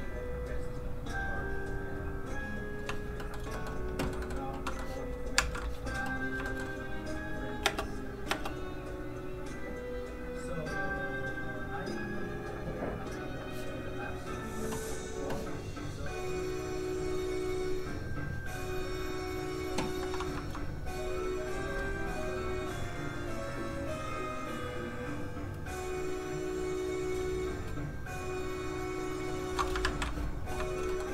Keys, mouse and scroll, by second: 0.0 shift+click, 3.2 shift+middle click, 3.4 scroll down 1, 3.5 middle click, 5.3 ctrl+a, 6.3 shift+a, 6.4 shift+middle click, 7.3 click, 7.4 click, 7.6 space, 8.9 click, 21.0 click, 22.2 shift+click, 29.7 ctrl+click, 29.8 ctrl+a, 30.5 shift+a, 30.8 middle click, 31.0 scroll up 1.